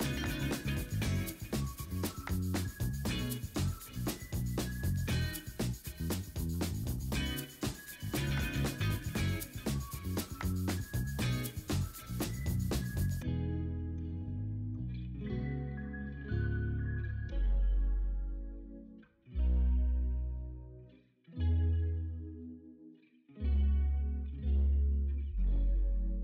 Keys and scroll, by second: 0.0 v, 0.6 v, 0.8 ctrl+t, 2.2 ctrl+t, 2.3 ctrl+a, 2.3 v, 4.0 ctrl+d, 4.2 ctrl+a, 4.5 ctrl+a, 5.1 ctrl+d, 5.3 ctrl+t, 8.9 w, 11.3 ctrl+t, 12.4 s, 14.4 ctrl+l, 15.2 Escape, 15.5 ctrl+m, 16.3 Escape, 18.7 ctrl+u, 19.6 b, 21.2 x, 21.5 ctrl+z, 22.2 0, 22.7 ctrl+z.